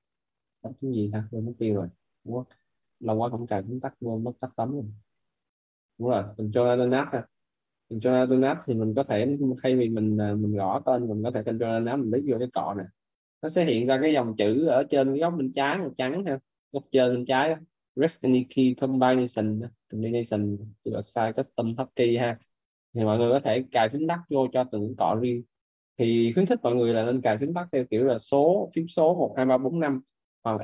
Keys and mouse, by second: 3.1 click, 5.0 click, 8.2 click, 12.2 ctrl+alt+click.